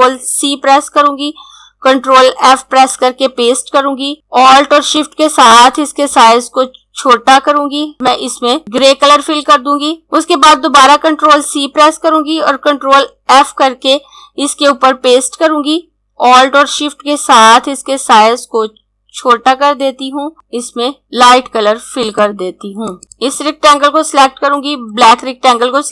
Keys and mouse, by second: 0.2 ctrl+c, 4.9 click, 8.0 click, 10.0 z, 11.3 ctrl+c, 20.3 click, 23.1 click, 24.9 click.